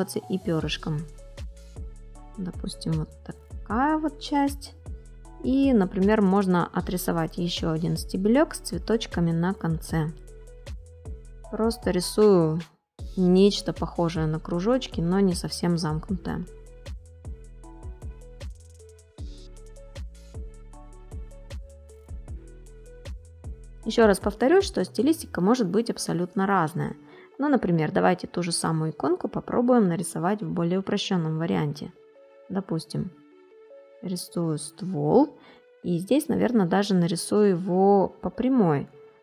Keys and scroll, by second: 23.5 ctrl+space, 24.9 ctrl+z, 25.5 space, 34.4 ctrl+z, 37.5 ctrl+z.